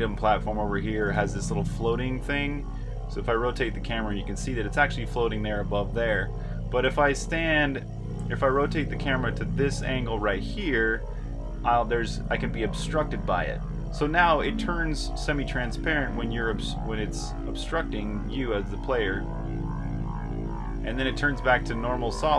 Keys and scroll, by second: 0.0-7.5 typing, 8.6 r, 9.8-13.1 typing, 14.4-16.8 typing, 18.3-20.0 typing.